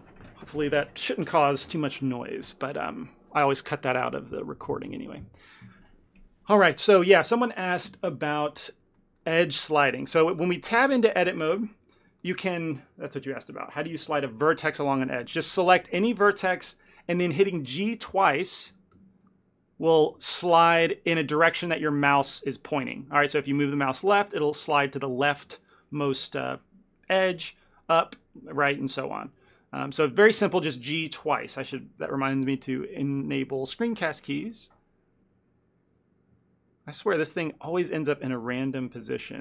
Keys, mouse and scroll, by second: 35.3 n.